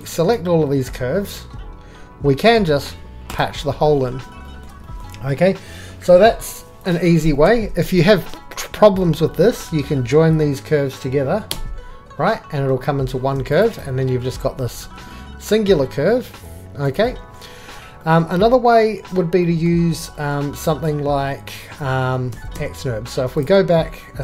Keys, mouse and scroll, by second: 0.7-2.4 drag, 2.5 alt+f, 6.7 shift+middle click, 7.6 ctrl+z, 11.5 click, 12.7 j, 14.8 click, 18.7 click, 20.7 click, 21.8 ctrl+z, 22.4 ctrl+z, 23.4 click.